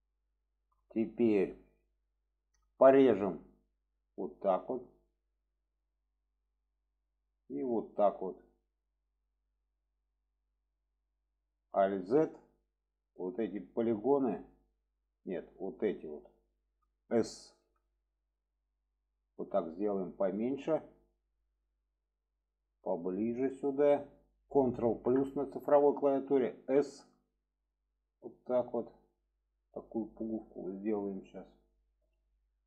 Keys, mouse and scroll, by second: 0.3 shift+middle click, 5.7 click, 7.9-9.5 drag, 10.4 click, 11.2 click, 11.9 alt+z, 12.5-14.2 drag, 15.3 drag, 15.9-16.6 drag, 21.5 click, 22.7-24.0 drag, 25.0 ctrl+KP_Add, 26.6 s, 30.2 click.